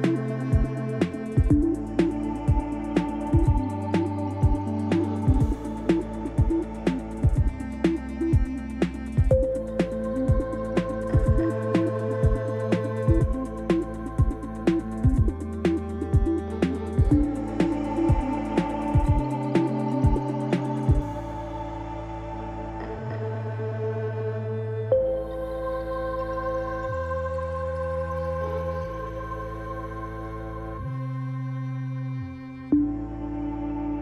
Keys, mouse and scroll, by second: 2.5 s, 4.3-22.8 middle drag, 5.2 KP_7, 6.3-7.7 scroll down 2, 10.0 s, 14.7 g, 19.8 KP_3, 22.8-34.0 drag, 30.4-30.8 scroll up 2, 31.9 shift+middle click.